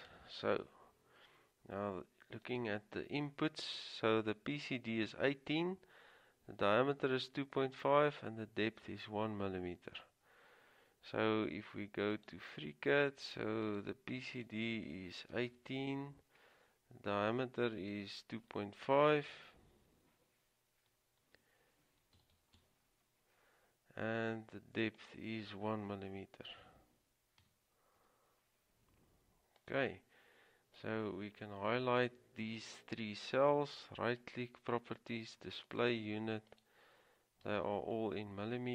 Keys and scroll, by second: 0.0-0.7 typing, 3.3-4.1 typing, 15.2-16.1 typing, 22.3 typing, 24.9-25.6 typing, 27.6 typing, 37.6 typing.